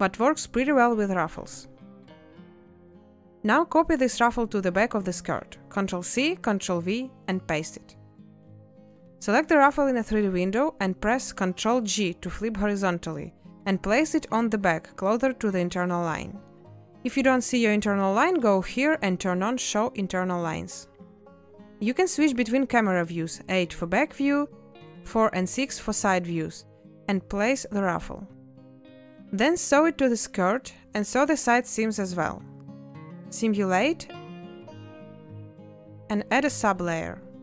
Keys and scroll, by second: 2.4 space, 3.6 a, 22.3 8, 25.3 6, 29.2 n, 36.2 space.